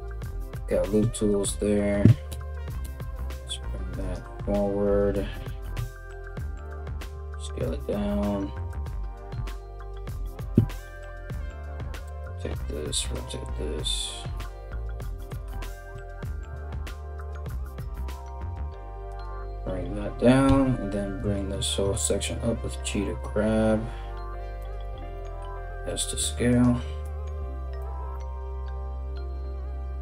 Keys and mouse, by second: 0.6 KP_3, 1.9 g, 6.7 s, 8.9 KP_1, 10.5 r, 12.1 r, 13.9 g, 15.8 ctrl+r, 20.1 g, 24.7 s, 26.6 g, 28.6 KP_3, 28.9 g, 29.6 s.